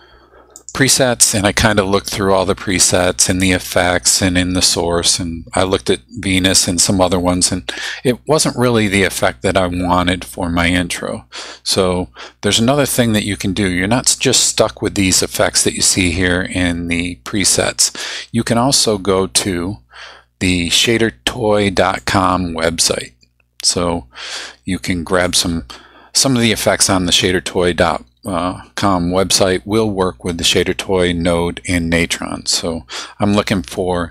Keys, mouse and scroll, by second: 0.6 click, 22.0 click, 25.3 click.